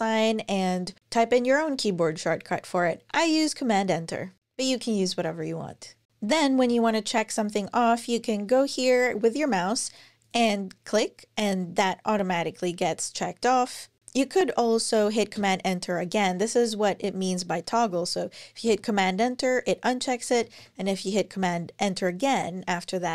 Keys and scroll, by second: 5.9 Escape, 15.1 super+Return, 18.4 super+Return, 20.2 super+Return.